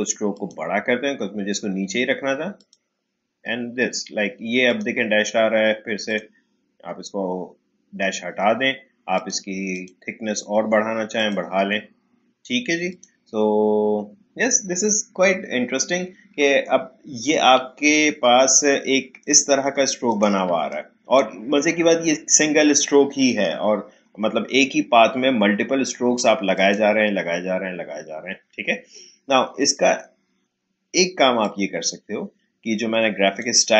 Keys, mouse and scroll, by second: 9.1 click, 17.2 click, 18.0-18.4 alt+scroll down 1, 19.4 alt+scroll up 1, 20.1 click, 20.4 space, 20.7 click, 20.9 space, 26.5 click, 31.4-33.7 drag.